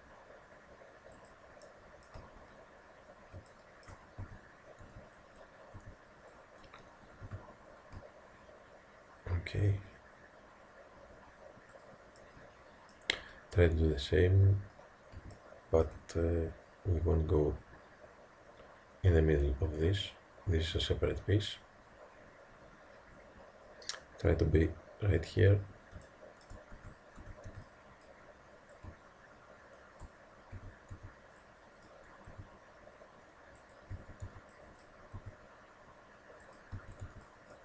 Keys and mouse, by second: 1.7-5.1 middle drag, 4.3 a, 4.8 b, 5.3 click, 5.8 b, 7.3 g, 12.2-17.2 middle drag, 13.7 a, 26.1-27.5 middle drag, 26.8 a, 27.3 a, 27.5 b, 28.7 click, 30.6 a, 32.0 b, 32.3 g, 34.0 a, 34.3 b, 35.2 g, 36.8 a, 37.0 b.